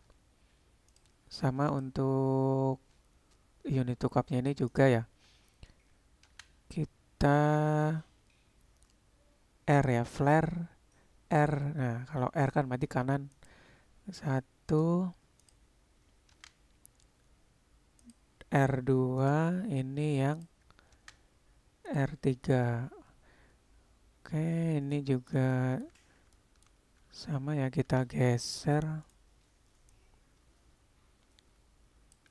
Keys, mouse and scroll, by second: 1.7 click, 4.8-13.6 drag, 14.8 click, 15.5-18.3 drag, 19.2 click, 20.4 click, 21.2 click, 25.0-25.3 middle drag, 25.6 shift+middle click, 26.4 shift+drag, 27.9 c, 30.1-32.2 drag.